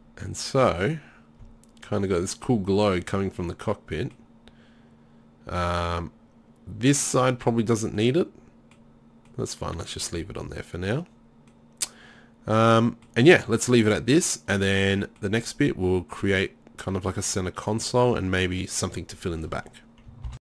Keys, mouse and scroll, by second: 0.5-1.0 middle drag, 8.0 drag, 12.7 click.